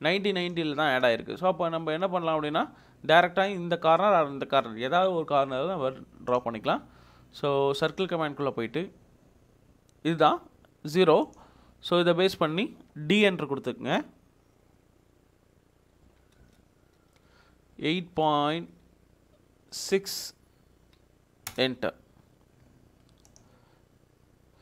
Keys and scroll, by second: 16.0 d, 16.4 Return, 18.3-19.0 typing, 20.7-21.4 typing, 21.5 Return.